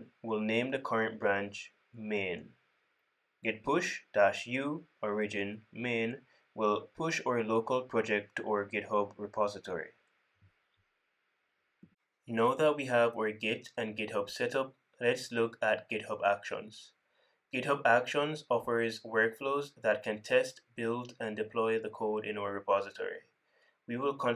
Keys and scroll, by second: 4.7 super+c, 5.6 super+c, 8.0 super+v.